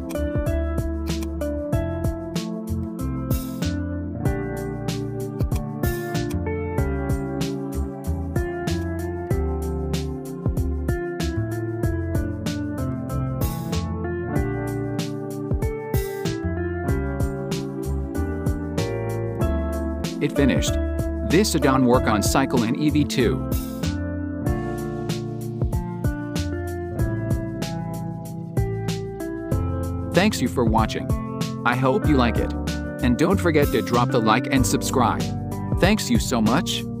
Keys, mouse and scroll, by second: 1.0-4.1 drag, 5.1 click, 5.9 click, 8.6 click, 21.0 right click, 21.3-37.0 drag.